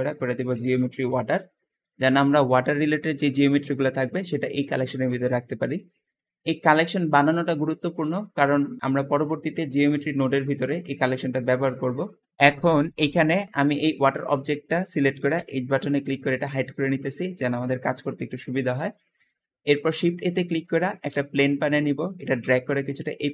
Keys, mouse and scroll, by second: 0.0-1.0 typing, 12.4 Escape, 12.4 click, 12.7 scroll down 2, 13.0 middle click, 13.4 g, 15.0 h, 15.7-18.9 middle drag, 18.9-19.2 scroll up 1, 19.4 shift+a, 21.7 drag, 22.5 click, 22.7-23.3 drag.